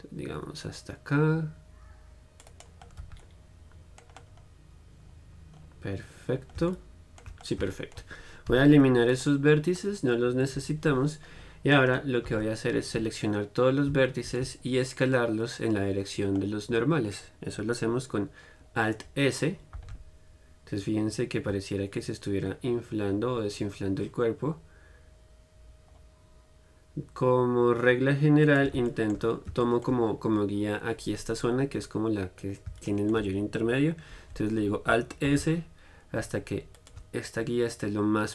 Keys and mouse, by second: 3.3 z, 10.8 KP_1, 12.5 a, 20.0-28.7 middle drag, 28.8-33.1 drag, 33.1-35.6 middle drag.